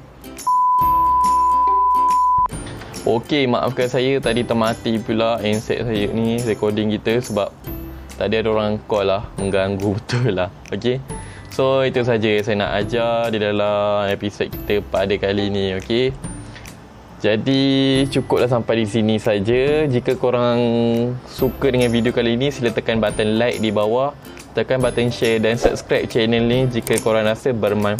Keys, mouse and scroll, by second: 9.1 click, 12.8 click, 19.4 click.